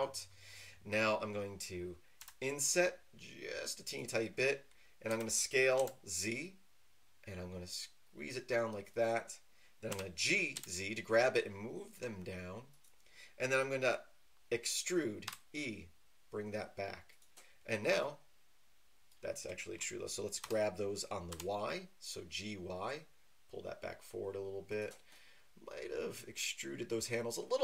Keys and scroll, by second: 2.2 i, 5.1-5.8 typing, 9.9 g, 10.5 z, 15.2 e, 20.4-21.3 typing.